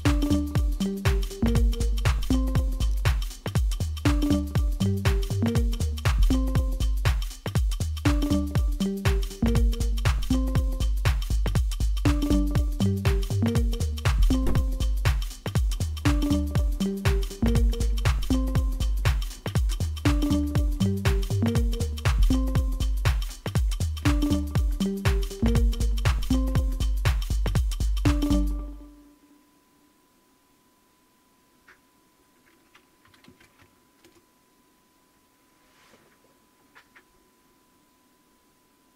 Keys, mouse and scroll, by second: 18.8-20.0 typing, 20.6 Right, 21.1 Return, 22.6-26.4 typing, 32.8-34.2 typing.